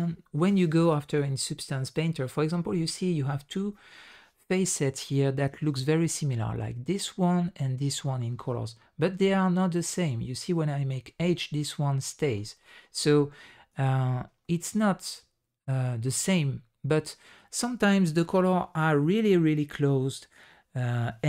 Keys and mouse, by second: 2.6 middle drag, 3.8 middle click, 9.3 h, 13.3 alt+h, 14.4 middle click.